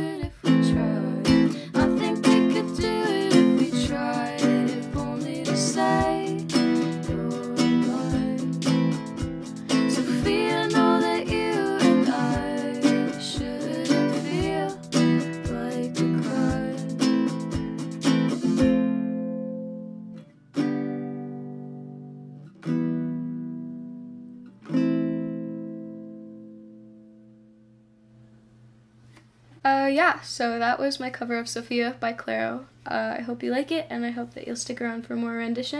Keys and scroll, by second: 1.0 Tab, 1.6-2.4 typing, 2.8 Return, 13.0 Return, 14.9 F9.